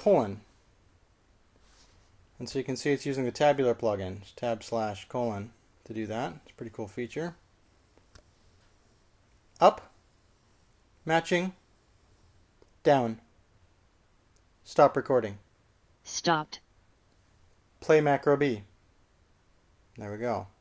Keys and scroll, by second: 1.2 typing, 10.7 k, 12.3 shift+5, 14.0 j, 16.1 q, 19.4 typing.